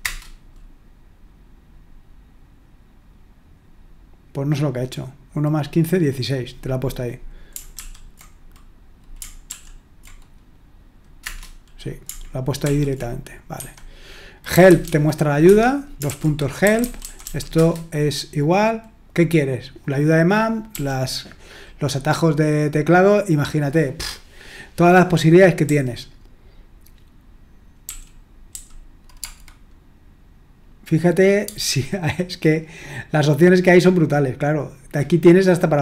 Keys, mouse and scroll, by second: 0.0 Return, 7.8 ctrl+l, 9.4 ctrl+p, 11.2 Return, 12.6 ctrl+l, 13.6 Escape, 14.3-17.7 typing, 15.4 Escape, 20.7 k, 25.6 j, 27.8-29.2 typing.